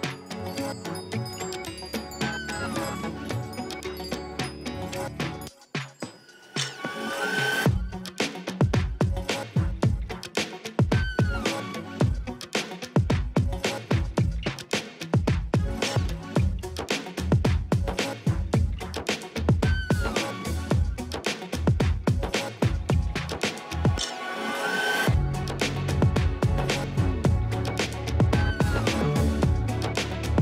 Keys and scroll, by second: 0.0 space, 0.1 space, 0.8 space, 1.4 space, 3.9 ctrl+alt+z, 4.0 space, 4.4 ], 9.1 space, 11.1 space, 19.1 ctrl+alt+d, 20.3 6, 23.3 ctrl+alt+z, 25.6 ctrl+j, 25.9 v.